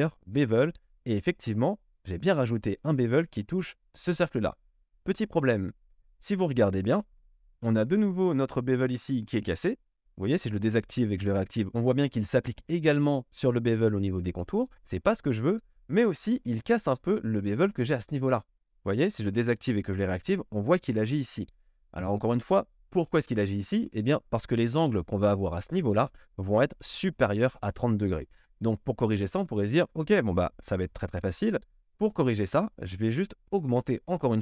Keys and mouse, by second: 10.6 middle click, 11.1 click, 11.3-18.9 middle drag, 18.9 click, 19.0 middle click, 19.7 click, 19.9 middle click, 20.1 click, 20.3-33.0 middle drag, 33.0 click, 33.1-34.4 shift+middle drag.